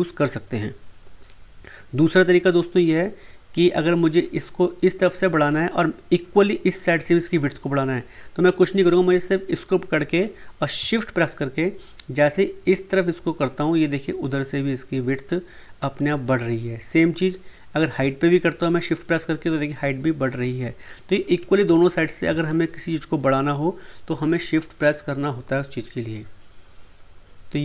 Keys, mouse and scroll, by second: 9.6-21.6 drag, 21.6 ctrl+z.